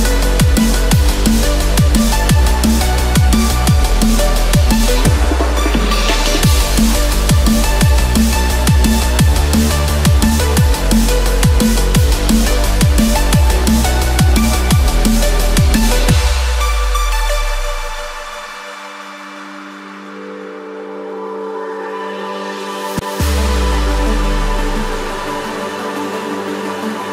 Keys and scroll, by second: 6.4 ctrl+i, 14.0 ctrl+z.